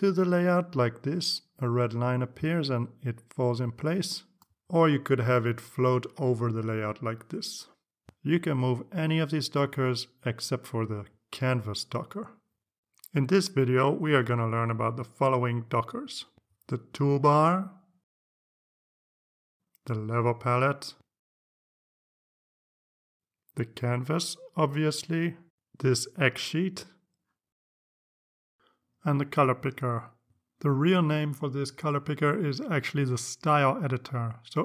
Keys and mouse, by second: 4.0-6.2 drag, 8.1 click, 9.3 click, 9.6-11.9 drag.